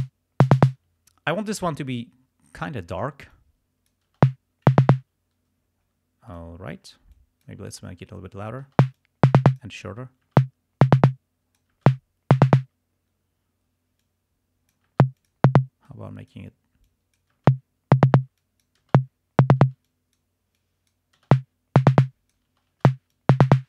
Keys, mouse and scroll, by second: 0.9 space, 3.4 click, 4.1 space, 5.0 space, 6.3 click, 7.2 click, 8.8 space, 9.1 click, 9.9 space, 11.0 space, 11.1 click, 11.8 space, 12.7 space, 14.0 click, 14.9 space, 15.4 click, 15.5 space, 15.9 click, 16.9 click, 17.5 space, 18.2 space, 18.4 click, 19.0 space, 19.6 space, 19.9 click, 20.6 click, 21.3 space, 22.0 click, 22.5 space, 23.2 click.